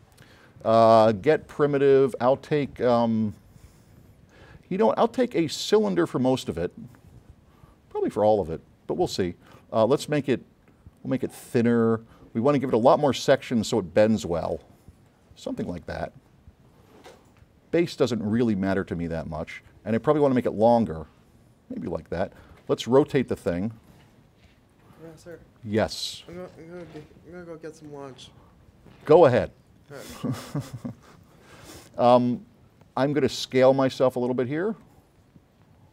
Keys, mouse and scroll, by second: 1.1 click, 8.1 click, 10.1 click, 12.8-14.6 drag, 17.7 click, 20.4 click, 22.8 click, 23.9-25.2 drag, 26.0 click, 27.9 click, 29.1-30.6 drag, 34.9 click.